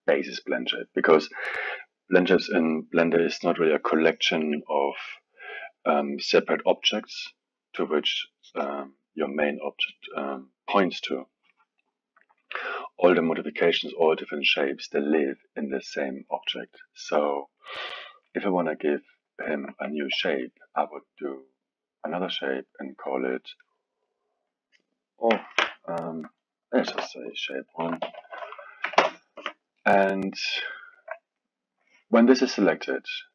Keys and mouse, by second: 18.6-19.3 drag, 19.3-22.0 alt+middle drag, 22.0-22.8 drag, 22.9-26.0 drag, 30.8 alt+middle click, 31.3 click, 32.5-33.3 drag.